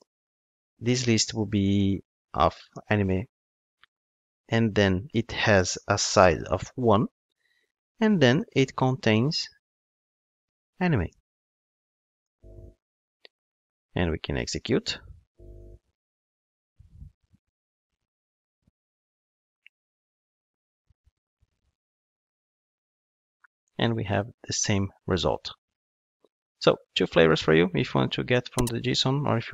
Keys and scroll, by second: 15.0 ctrl+shift+d.